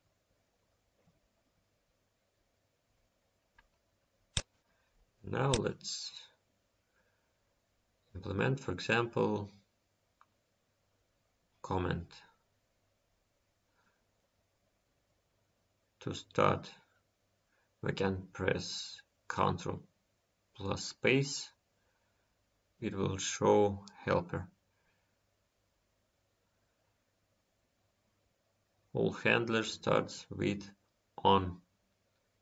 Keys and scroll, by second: 14.5 ctrl+space.